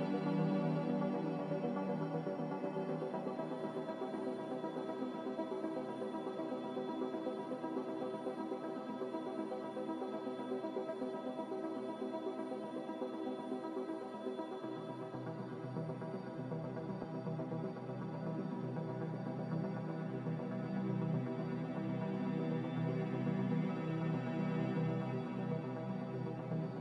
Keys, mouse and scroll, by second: 5.3-6.1 typing, 11.1 5, 11.3 Return, 14.6 5, 14.8 Return, 16.0 z, 22.5 ctrl+s, 26.2 a.